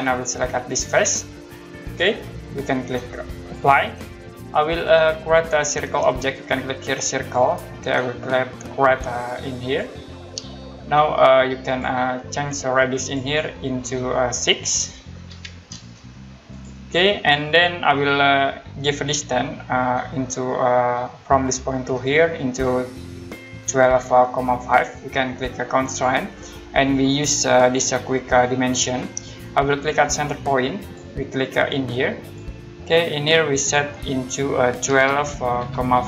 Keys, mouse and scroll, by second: 0.9 click, 3.3 click, 4.5 scroll up 1, 7.2 click, 9.6 click, 11.7 click, 15.3 6, 16.5 click, 25.9 click, 28.6 click, 30.8 click, 34.5-36.0 typing.